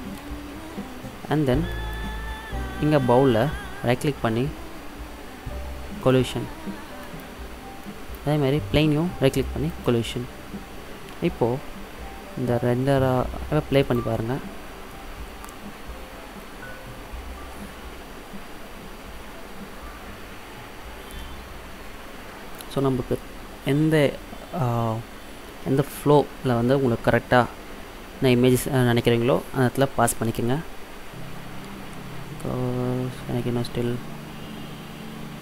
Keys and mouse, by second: 0.0 middle drag, 1.9-3.6 right drag, 3.6 middle click, 6.1-7.9 drag, 8.0-9.8 middle drag, 9.8-11.6 drag, 9.8 right click, 13.9 click.